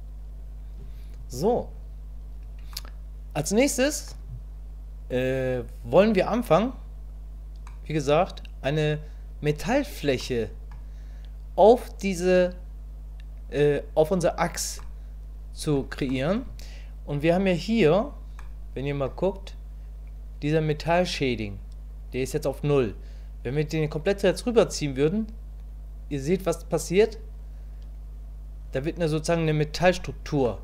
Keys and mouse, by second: 2.7-4.1 middle drag, 7.7 middle click, 10.2 middle click, 14.8 middle click, 16.1 middle click, 18.5 middle click, 23.7-30.0 drag, 30.4-30.6 middle drag.